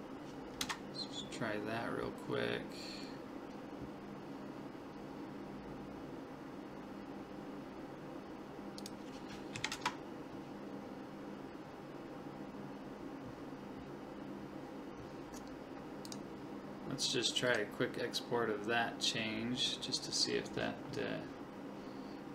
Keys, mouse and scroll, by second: 8.8 click, 16.1-19.4 drag.